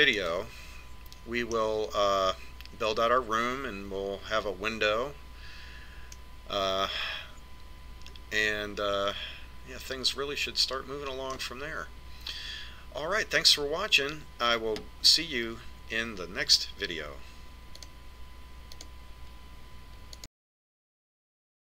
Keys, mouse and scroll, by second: 7.6-9.4 middle drag.